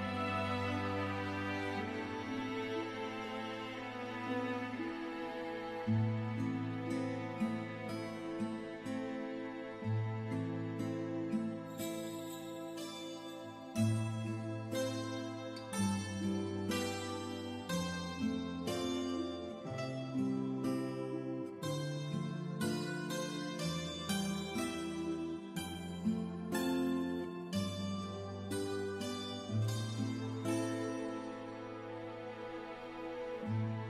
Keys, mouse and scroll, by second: 1.9 scroll down 1, 5.6 r, 6.6 click, 9.0 w, 10.1 click, 15.4-15.8 scroll down 1, 15.9 alt+middle click, 19.0 scroll down 1, 21.3 scroll up 1, 21.3 g, 22.7 click, 31.8 KP_9, 32.7 KP_Enter.